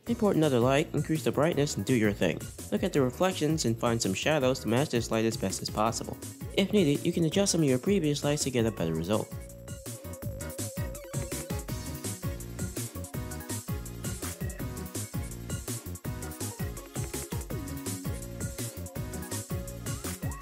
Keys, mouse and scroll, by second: 0.0 shift+a, 0.8 r, 1.0-2.4 drag, 2.6 shift+middle click, 2.6 scroll down 5, 2.7 r, 5.2 r, 9.6 r, 9.9 r, 10.5 scroll down 2, 10.7 shift+middle click, 11.0 scroll up 1, 11.3 shift+middle click, 11.8 scroll up 1, 12.7 click, 13.1 click, 17.7 click, 18.3-20.4 drag.